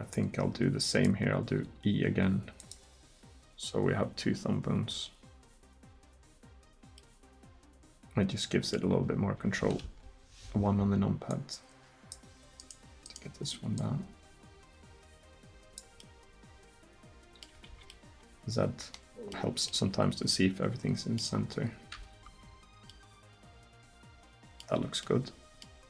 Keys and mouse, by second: 1.6 e, 9.8 KP_1, 16.2 middle click, 17.7 z, 21.5 middle click, 22.0 a, 22.4 a, 24.8 z.